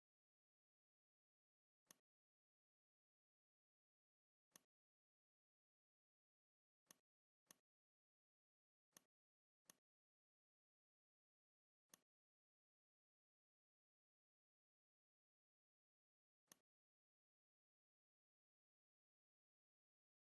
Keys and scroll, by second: 1.4 v, 4.1 z, 6.8 a, 11.1 n, 16.0 v, 19.4 shift+m.